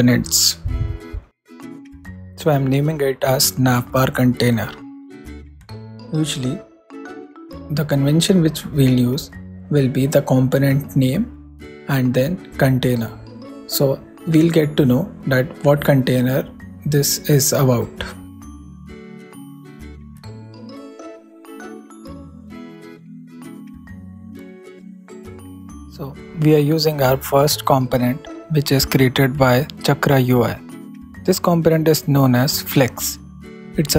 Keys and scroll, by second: 1.8-4.1 typing, 5.3 super+r, 5.5 super+s, 6.2 super+Down, 18.9 alt+shift+Left, 19.4 alt+shift+f, 19.7 shift+l, 20.8 super+x, 20.9 super+s, 21.5 super+Right, 22.3 alt+shift+Right, 22.8 alt+shift+f, 23.1 shift+l, 23.6 super+x, 23.7 super+s, 24.1 super+Left, 26.3 super+Up, 26.6 super+Right, 27.9 alt+Up, 28.0 alt+Right, 29.5 alt+shift+Left, 30.5 shift+[, 30.9 shift+p.